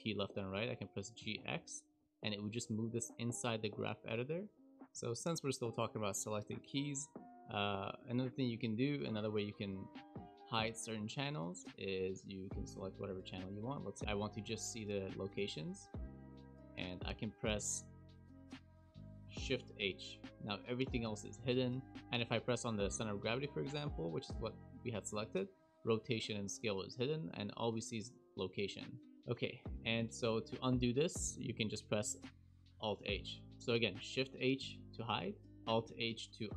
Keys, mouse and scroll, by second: 1.2 g, 4.7 click, 11.9 click, 12.8 click, 13.5 click, 13.9 shift+click, 14.1 shift+click, 15.3 KP_Decimal, 15.7-16.4 scroll down 6, 16.0-18.4 scroll up 4, 18.4-18.8 scroll up 1, 19.4 shift+h, 21.9 shift+middle click, 21.9 click, 25.6 click, 26.4 click, 27.8 click, 29.7 a, 32.7 alt+h, 35.2 alt+h, 35.5 click, 35.5 scroll up 1.